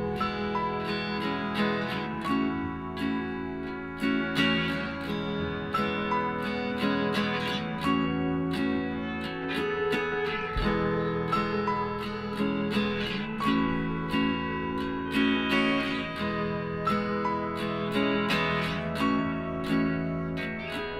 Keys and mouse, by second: 3.4-6.5 middle drag, 6.5-9.1 right drag, 8.1 f, 10.0-11.7 drag, 10.6-13.2 right drag, 12.4 g, 14.0-15.6 drag, 16.0-18.4 right drag, 17.7 g, 19.1-20.9 middle drag.